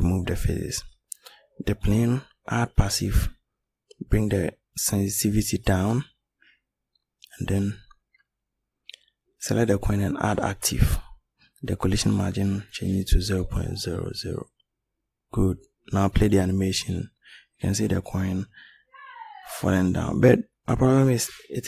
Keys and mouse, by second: 0.7-5.0 drag, 5.5-7.0 right drag.